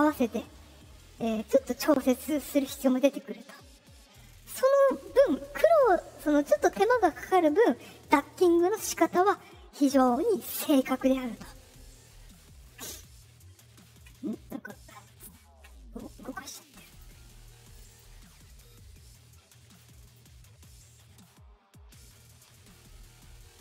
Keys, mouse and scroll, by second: 11.2 right click, 12.9 middle click, 12.9 scroll, 16.7 click, 16.8 click, 17.7 click, 17.8 click, 19.7 click.